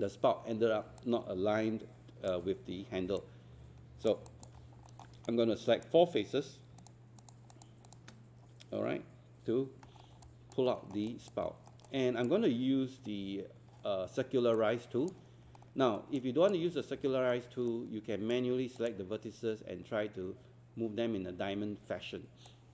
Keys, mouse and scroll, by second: 1.0 alt+click, 3.2 alt+click, 4.3 alt+click, 4.6 scroll up 1, 4.9 alt+middle click, 5.3-6.6 right drag, 6.8 shift+click, 7.5 shift+click, 10.2 alt+click, 10.7 alt+middle click, 11.1 alt+click, 11.8 alt+click, 12.4 alt+middle click, 14.6-18.3 drag, 18.8 click.